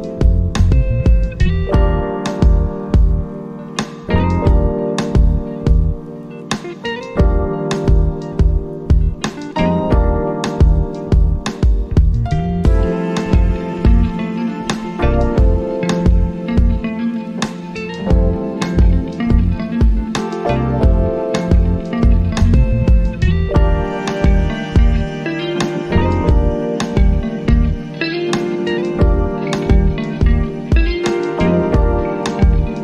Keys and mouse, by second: 0.3 alt+click, 21.6-25.7 drag, 25.7 right click, 27.4 click.